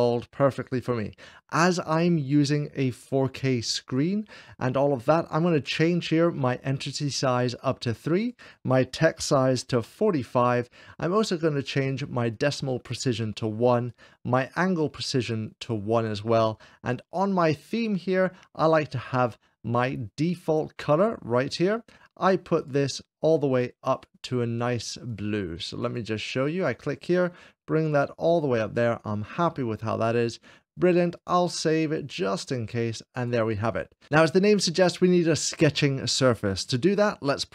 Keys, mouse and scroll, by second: 1.8 scroll down 1, 6.6-7.6 drag, 7.5 scroll down 1, 8.0-9.0 drag, 9.4 4, 9.6 5, 9.8 Return, 10.7 Return, 12.1-13.0 scroll down 2, 13.0 click, 13.3 1, 13.7-15.3 drag, 14.9 1, 15.5 click, 16.4 scroll down 1, 17.0-18.0 drag, 21.3-22.4 drag, 21.6-22.4 scroll down 1, 23.0 click, 23.8-24.8 drag, 24.9-28.6 drag, 29.8-30.8 drag, 31.0-33.0 drag, 33.5 click.